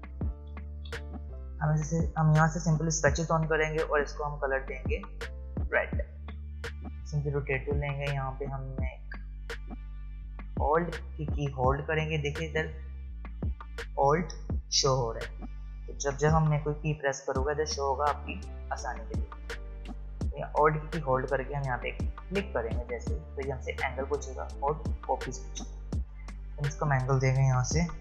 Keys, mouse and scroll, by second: 0.9 v, 3.0 click, 5.6 click, 6.1 ctrl+z, 7.7 click, 22.3 alt+click.